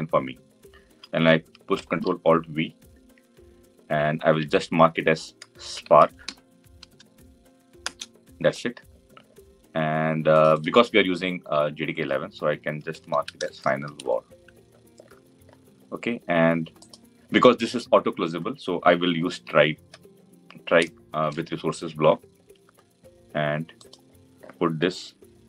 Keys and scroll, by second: 1.4 Return, 3.4 ctrl+alt+v.